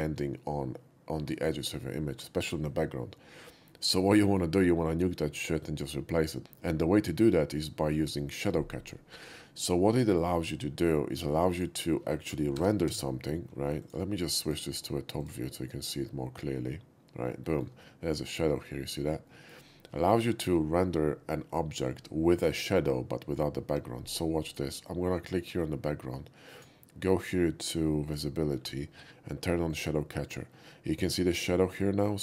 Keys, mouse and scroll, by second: 9.8 click, 11.5 click, 12.8 g, 13.0 z, 13.9 click, 14.5 click, 15.2 click, 17.0-17.3 scroll up 1, 17.3-17.7 shift+middle drag, 17.7 scroll up 1, 17.9-19.3 shift+middle drag, 19.6 middle click, 19.8-20.5 shift+middle drag, 24.4 click, 26.5 click, 28.1 click, 28.6-29.7 middle drag, 29.7 click.